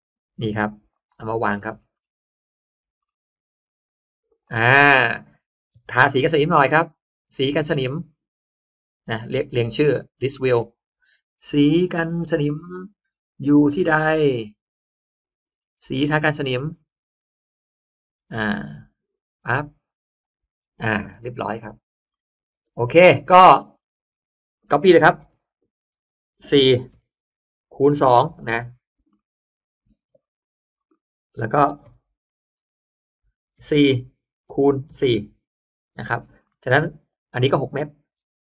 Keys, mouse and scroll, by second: 0.8 click, 1.2 middle click, 1.2-1.8 scroll up 1, 1.8 middle click, 2.1 middle click, 2.6 middle click, 4.2 click, 4.6 scroll down 1, 4.6 space, 4.9-5.8 scroll up 2, 5.5 middle click, 5.7 b, 6.7 click, 9.0 click, 10.1 click, 15.4-16.1 scroll down 1, 16.8-17.1 scroll down 1, 19.0 click, 19.7-20.1 scroll up 1, 20.1 click, 20.7-21.8 scroll down 1, 21.1 space, 22.0 middle click, 22.1-23.1 scroll up 4, 22.6 space, 23.0 middle click, 23.1-23.7 scroll down 2, 23.9-24.5 scroll up 3, 24.5-24.9 scroll down 1, 25.1 m, 25.5 click, 26.8 4, 27.1 Return, 27.8-28.9 typing, 29.1 middle click, 29.7 scroll down 1, 30.0 space, 30.2 scroll up 1, 30.3 click, 30.8 middle click, 30.8 scroll up 1, 31.1-31.4 scroll down 1, 31.7 m, 32.2 click, 33.5 4, 33.7 Return, 34.3 x, 34.8 4, 35.0 Return, 35.9 space, 36.3 middle click, 36.5-36.9 scroll down 1, 37.0-37.4 drag, 37.7-38.1 scroll up 1, 38.1 n.